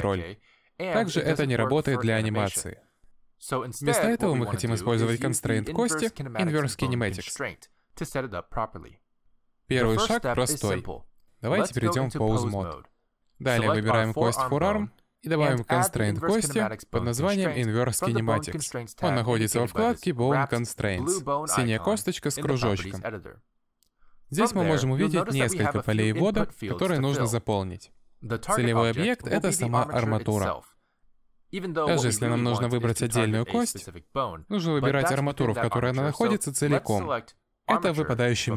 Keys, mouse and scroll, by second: 1.2 click, 1.5 middle click, 1.8 g, 4.3 click, 6.7 n, 8.4 middle click, 9.0 shift+middle click, 12.8 click, 15.1 middle click, 15.7 click, 18.0 click, 23.4 click, 31.0 click.